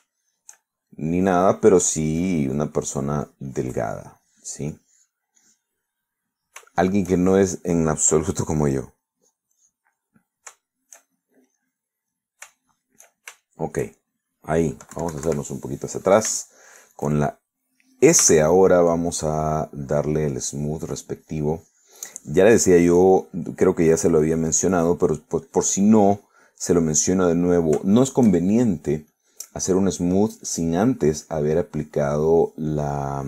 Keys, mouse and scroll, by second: 0.0 middle click, 0.7-1.7 middle drag, 2.2 click, 2.7 middle click, 3.3-5.2 drag, 6.3 click, 6.5 click, 7.0 middle click, 7.8-9.3 shift+middle drag, 9.4 middle click, 10.1 click, 11.0 middle click, 11.7 shift+middle click, 14.3-15.4 shift+middle drag, 16.0 KP_Subtract, 17.0 middle click, 17.5-18.9 shift+middle drag, 19.3 s, 20.4-23.2 drag, 24.0 click, 25.1 click, 25.6 middle click, 26.5-28.3 drag, 28.3 middle click, 28.9-29.9 shift+middle drag, 30.2-31.8 shift+drag, 31.9 middle click.